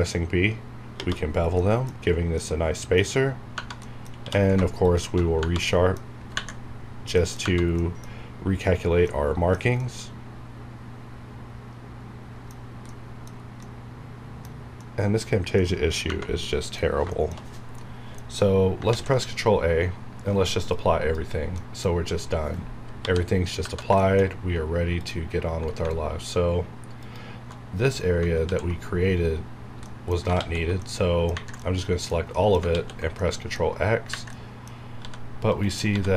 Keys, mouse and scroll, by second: 1.3 scroll down 1, 1.6 middle click, 1.9 scroll up 1, 2.4 middle click, 3.3 scroll down 1, 3.5 Tab, 3.8 middle click, 4.1 q, 4.8 ctrl+shift+click, 7.4 Tab, 7.8 middle click, 8.1 scroll up 1, 8.8 scroll down 1, 9.1-13.3 middle drag, 13.3 scroll down 1, 13.6-16.1 middle drag, 16.4 middle click, 17.5 scroll down 1, 17.7 middle click, 18.9 ctrl+a, 20.7 click, 21.6 middle click, 21.9 scroll up 1, 22.9 KP_7, 23.6 Tab, 23.6 Right, 24.0 shift+middle click, 24.2-24.9 shift+scroll up 2, 24.9 alt+click, 27.5 alt+shift+scroll down 2, 28.4 ctrl+x, 29.5 scroll down 1, 29.8 middle click, 30.2 scroll up 1, 30.4 ctrl+x, 30.8-32.3 middle drag, 32.7 ctrl+x, 33.2 middle click, 33.6 scroll up 1, 34.3 middle click, 34.8 scroll up 1, 34.9 g, 35.5 right click, 35.9 g.